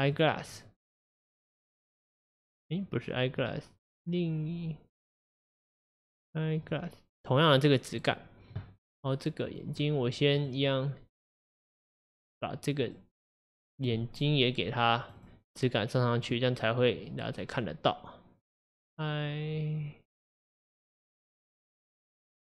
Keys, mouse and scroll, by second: 7.6-9.5 middle drag, 9.5 click, 10.5 click, 15.1-16.3 drag.